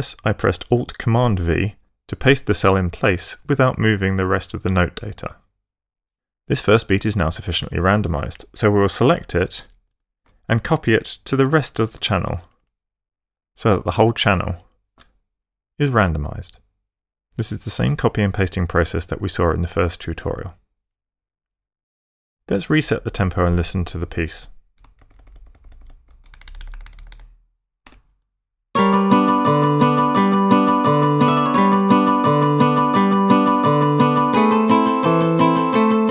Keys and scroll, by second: 9.4 shift+Up, 11.7 super+c, 12.0 super+v, 12.5 super+v, 12.6 super+v, 12.7 super+v, 24.8 shift+Tab, 27.7 4, 27.9 Up, 28.6 space.